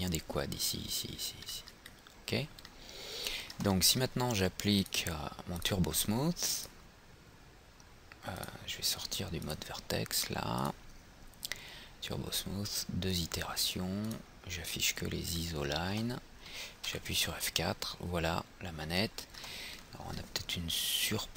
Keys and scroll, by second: 17.0 F4.